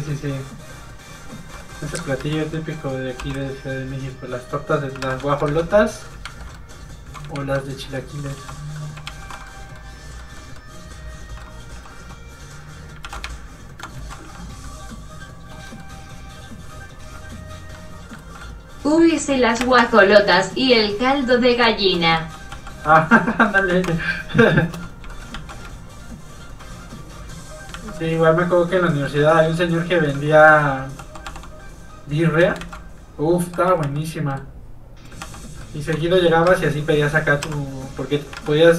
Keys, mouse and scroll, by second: 0.1 ctrl+click, 1.6 ctrl+middle click, 1.7 middle click, 1.9 Tab, 2.2 a, 3.2 q, 4.5 click, 5.0 alt+a, 5.3 shift+middle click, 5.5 middle click, 5.6 Tab, 5.7 middle click, 6.3 ctrl+Tab, 6.6 middle click, 6.7 middle click, 7.4 ctrl+Tab, 8.0 Tab, 8.1 middle click, 8.4 alt+shift+z, 8.9 middle click, 9.1 alt+shift+z, 9.6 middle click, 10.0 scroll up 1, 10.6 scroll up 1, 10.7 middle click, 11.7 g, 12.1 click, 13.1 ctrl+z, 13.3 shift+click, 14.0 ctrl+z, 14.7 middle click, 15.0 scroll up 1, 15.6 scroll down 1, 17.1 h, 17.8 middle click, 18.1 ctrl+middle click, 18.2 ctrl+z, 18.4 ctrl+middle click, 18.5 middle click, 19.2 f, 19.3 click, 19.6 shift+space, 21.8 shift+click, 21.9 shift+space, 22.2 f, 22.4 click, 22.5 f, 22.7 click, 23.0 ctrl+click, 23.6 ctrl+z, 23.9 shift+space, 25.1 shift+middle click, 25.4 middle click, 25.5 click, 26.0 ctrl+click, 27.0 click, 27.1 click, 27.8 ctrl+z, 28.0 middle click, 28.2 scroll down 1, 28.7 middle click, 29.5 Tab, 29.8 middle click, 30.1-30.5 scroll up 1, 30.8 click, 31.0 g, 32.1 click, 32.6 ctrl+z, 33.2 z, 33.7 g, 34.1 click, 34.3 middle click, 34.4-34.9 scroll up 2, 35.0 click, 35.1 g, 35.4 click, 35.6 middle click, 36.0 shift+middle click, 36.3 middle click, 36.4 middle click, 36.5 a, 37.5 q, 38.0 click, 38.4 alt+a, 38.6 scroll down 1, 38.7 middle click.